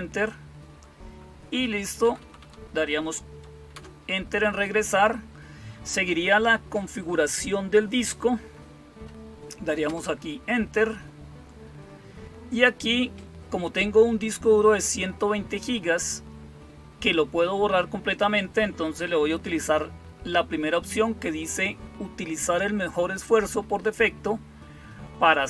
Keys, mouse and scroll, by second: 1.9 Down, 2.1 Down, 2.3 Down, 3.6 Return, 9.7 Return.